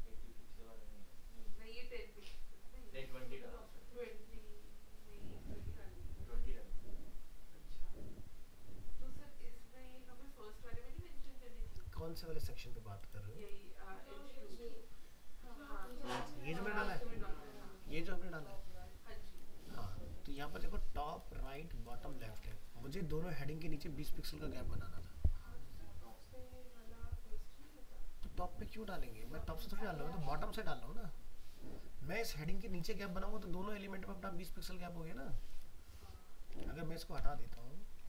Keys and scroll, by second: 22.4 alt+Tab, 36.5 alt+Tab.